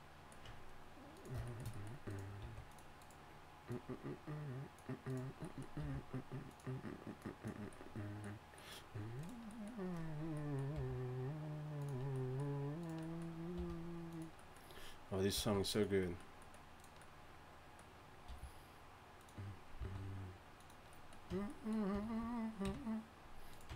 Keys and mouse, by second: 0.5 Tab, 2.4 s, 5.8 r, 13.6 r, 15.3 s, 18.3 r, 19.8 s, 21.3 Tab, 21.9 a, 22.6 KP_1, 23.7 Tab.